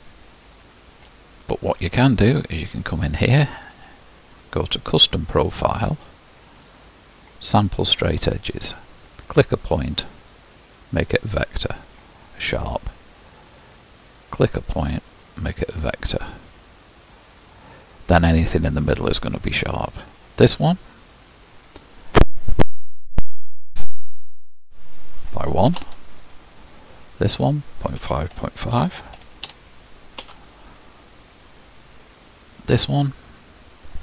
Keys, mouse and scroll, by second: 2.3-34.0 drag.